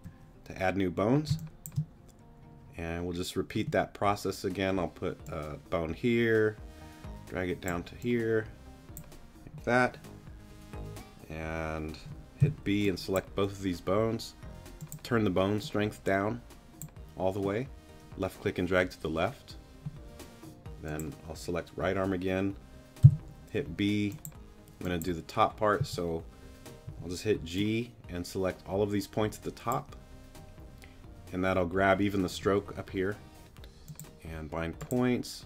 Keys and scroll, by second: 1.3 space, 12.4 b, 23.0 b, 25.8 g.